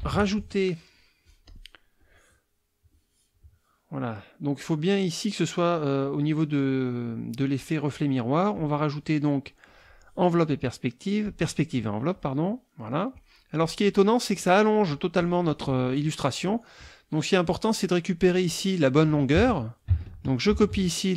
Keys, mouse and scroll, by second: 1.5 click, 2.0 click, 8.5 click, 9.6-10.2 drag, 11.2 click, 12.1 click, 16.4 click, 19.2 ctrl+click, 19.4 ctrl+a, 20.5 ctrl+c.